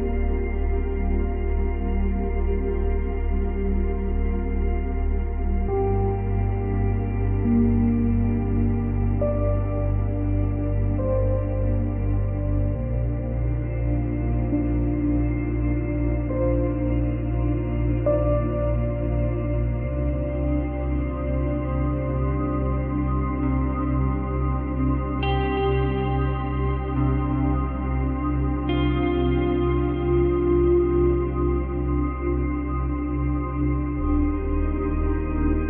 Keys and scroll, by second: 1.7 Delete, 22.4 space, 24.3 space, 25.1 space, 26.3 space, 27.5 space, 29.7 space, 30.0 ctrl+z, 31.6 space, 33.2 space, 33.4 ctrl+z.